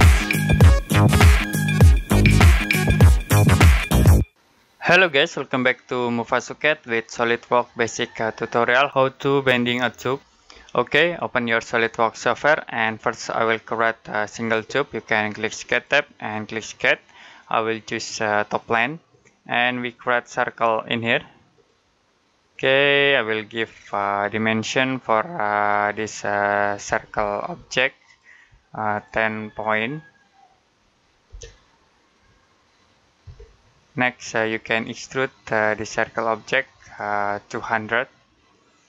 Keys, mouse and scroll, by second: 15.5 click, 27.2 Escape, 27.9 click, 31.1 typing, 33.1 typing, 34.2 click.